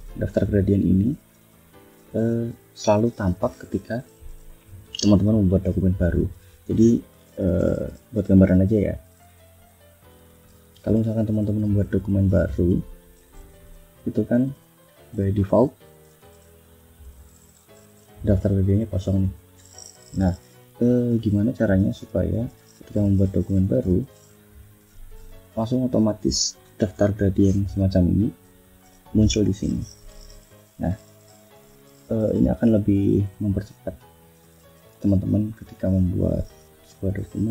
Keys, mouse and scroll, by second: 6.1 click, 7.4 ctrl+n, 10.7 Right, 11.5 click, 12.5 Left, 13.2 click, 13.8 click, 15.0 click, 15.5 click, 16.5 ctrl+shift+f, 18.5 click, 20.6 click, 21.6 F1, 21.9 click, 22.3 click, 27.0 click, 27.7 click, 30.3 click, 30.7 click, 32.8 click, 34.8 click, 36.8 click.